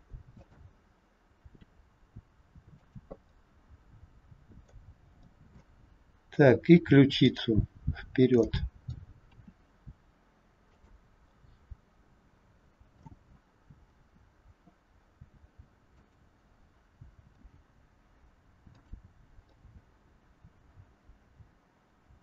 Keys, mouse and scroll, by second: 1.5 r, 3.2 middle click, 5.2 middle click, 6.0 scroll up 2, 7.2 click, 7.2 scroll up 1, 7.9-8.2 scroll down 2, 8.3 middle click, 9.3 r, 11.2 middle click, 13.3-13.8 scroll down 1, 13.8 r, 17.5 g, 19.5 middle click.